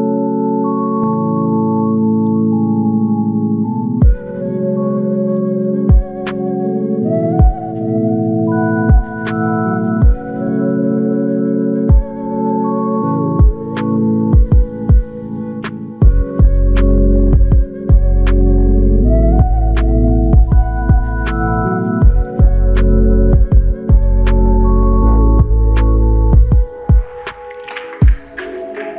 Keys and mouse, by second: 12.2 ctrl+click, 20.6 alt+click, 26.4 alt+l, 26.6 ctrl+click.